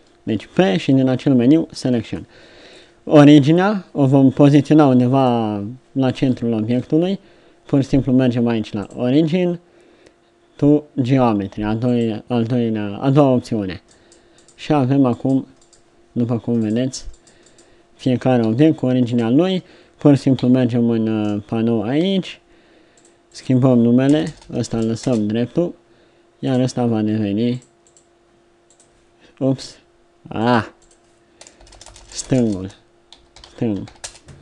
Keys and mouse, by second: 0.4 Tab, 1.0 Tab, 1.9 middle click, 2.3 z, 8.7-12.0 drag, 13.8 right click, 18.3 r, 20.4 n, 24.2 BackSpace, 31.7 BackSpace.